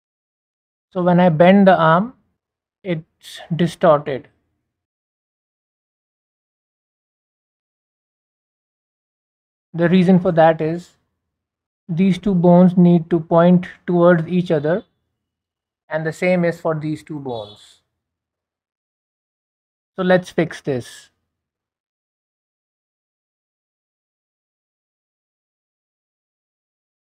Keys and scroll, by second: 24.7 Delete, 26.8 b.